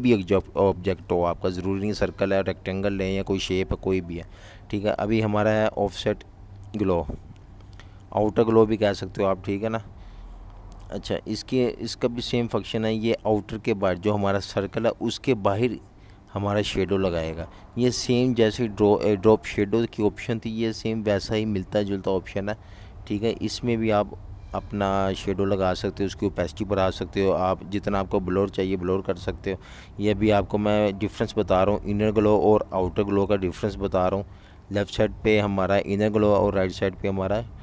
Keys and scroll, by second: 0.1-1.3 typing, 18.2-19.2 typing, 27.8 typing, 29.1 v, 31.4-32.3 typing, 34.9 super+-, 35.1 super+-, 35.3 super+-, 35.4 super+-, 35.6 super+-, 35.8 super+-, 36.1 super+-, 36.2 super+-.